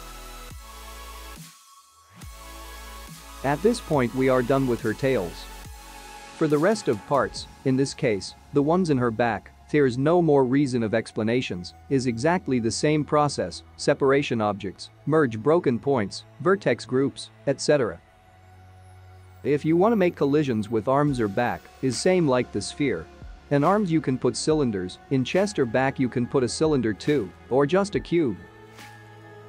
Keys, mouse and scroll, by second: 9.9 KP_0, 23.5 click, 24.7 space, 25.8 ctrl+click, 25.8 middle click, 25.8 s, 26.0 ctrl+click, 26.4 g, 26.9 ctrl+click, 27.0 `, 27.5 `, 28.9 r.